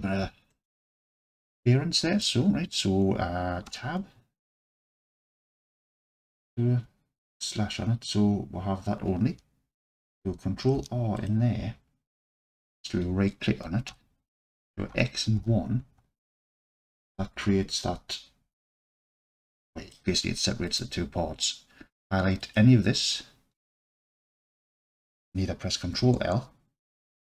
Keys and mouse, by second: 0.6-2.3 alt+middle drag, 3.7 Tab, 4.4-5.0 alt+drag, 6.1 KP_Divide, 7.2 alt+z, 10.6 ctrl+r, 12.5 click, 13.9 1, 14.9 x, 16.2-17.0 alt+drag, 18.6 click, 19.3 alt+click, 22.4 click, 26.0 ctrl+l.